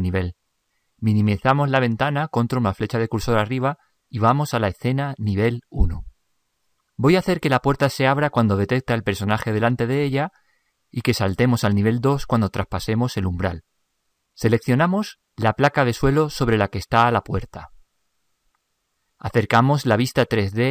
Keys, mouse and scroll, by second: 1.9 ctrl+Up, 4.6-5.5 drag, 13.6-15.3 drag, 15.2-18.0 right drag, 20.0-20.7 middle drag.